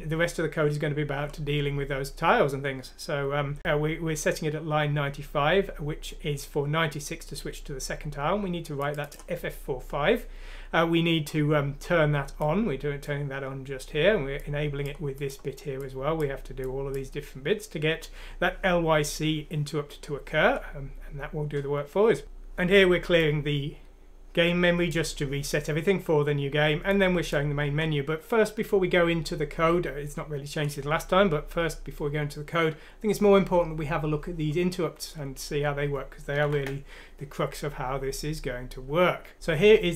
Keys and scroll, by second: 36.4 ctrl+End.